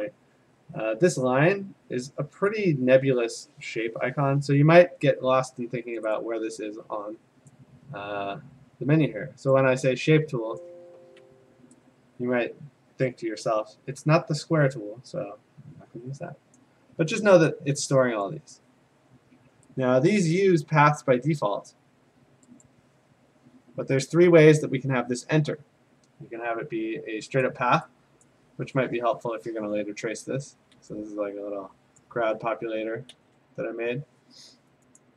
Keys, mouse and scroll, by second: 1.2 click, 2.5 click, 6.0 click, 6.2 click, 7.5 click, 9.6 click, 10.6 click, 11.5 Escape, 16.6 click, 18.3 click, 20.2 click, 20.8 ctrl+z, 22.7 click, 27.5 click, 28.3 click, 30.5 ctrl+z, 32.0 click, 33.1 ctrl+z, 35.0 click.